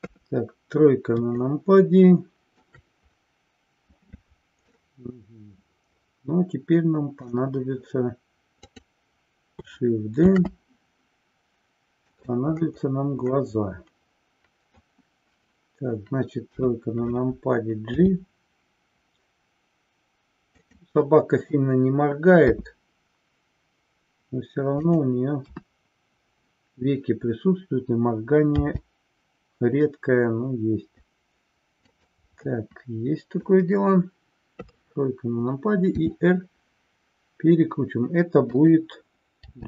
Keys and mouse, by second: 1.4-2.8 shift+middle drag, 4.8-7.3 middle drag, 8.5 click, 10.3 shift+d, 13.4-15.1 middle drag, 16.4 KP_3, 17.9 g, 20.7 drag, 25.7 KP_1, 32.5-33.7 middle drag, 34.7 KP_3, 36.1 r, 38.7 click.